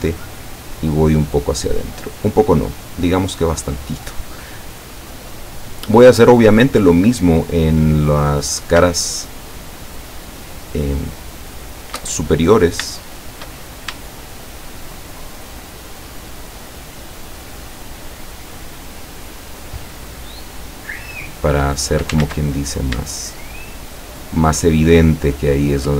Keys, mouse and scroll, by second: 3.4 click, 4.6-6.2 middle drag, 8.2 right click, 9.2 shift+right click, 10.5 shift+right click, 11.5 shift+right click, 12.4 shift+scroll up 3, 13.1 shift+right click, 13.7 shift+scroll up 1, 14.2-15.1 shift+middle drag, 16.3 shift+right click, 17.5 shift+right click, 18.1-19.7 shift+middle drag, 20.5 shift+right click, 21.1 shift+right click, 22.3 ctrl+shift+z, 22.5-22.9 scroll up 2, 23.4 shift+right click, 25.5 shift+right click.